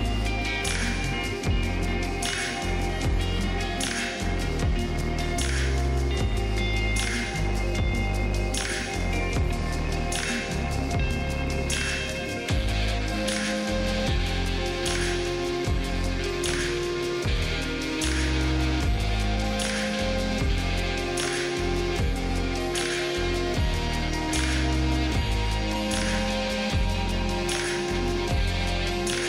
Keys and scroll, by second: 5.5 ctrl+space, 5.8 ctrl+space, 8.7 space, 14.6 space, 16.0 space, 19.8 space, 28.8 space.